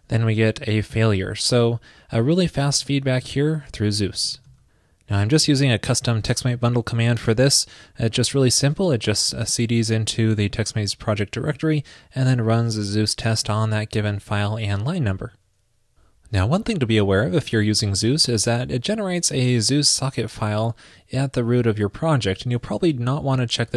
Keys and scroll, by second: 2.9 super+z, 4.5 super+s, 22.6 super+c.